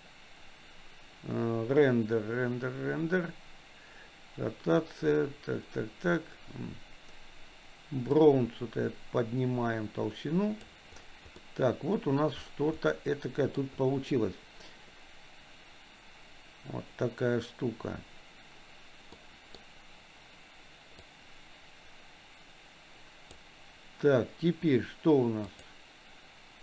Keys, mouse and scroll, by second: 8.2-10.7 drag, 11.4-12.2 middle drag, 12.9 middle click, 19.2 middle click, 21.1-23.4 drag, 25.4-26.6 drag.